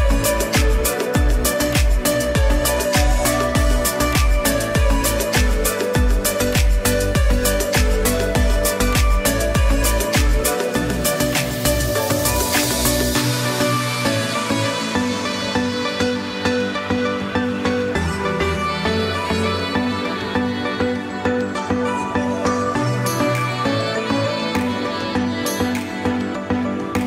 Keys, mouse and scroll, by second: 1.0 click, 2.2 j, 2.9 click, 11.6 click, 16.6 ctrl+z, 18.9 click, 21.8 ctrl+z, 24.3 click, 24.8 click.